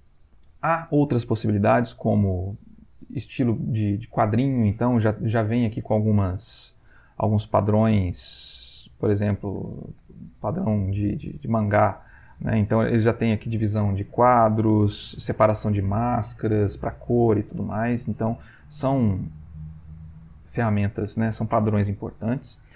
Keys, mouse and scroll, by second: 1.9 click, 8.5 click, 9.1 click, 10.0 click, 18.7 click, 20.2 click.